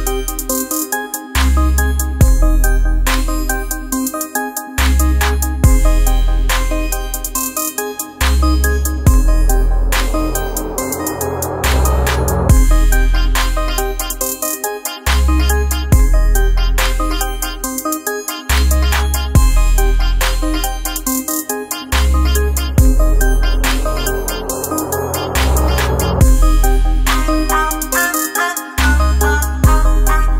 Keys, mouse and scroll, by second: 3.3 click, 5.6 ctrl+space, 5.8 ctrl+click, 6.1 ctrl+space, 7.4 click, 7.8 space, 8.1-13.6 drag, 9.5 typing, 16.3 typing, 17.3-18.1 typing, 19.9 super+space, 21.8 typing, 23.0-23.7 typing, 26.1 space, 28.1-30.3 drag.